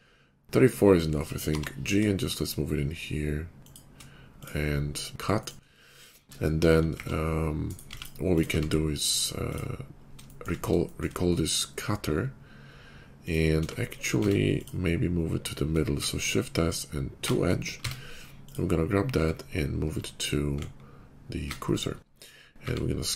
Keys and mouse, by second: 6.9 shift+d, 7.8-8.3 drag, 7.8 x, 8.3-13.0 middle drag, 8.4 q, 13.0 click, 13.2-14.4 middle drag, 13.5 Tab, 14.1 Tab, 14.4 click, 15.9 shift+s, 17.7 Tab, 20.5 shift+s, 22.5 s.